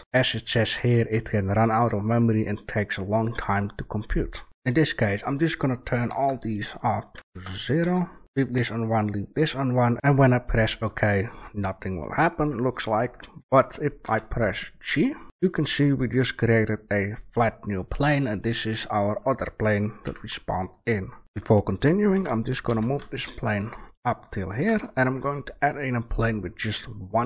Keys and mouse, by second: 13.9 g, 20.0 Delete, 22.0 g, 24.4 a.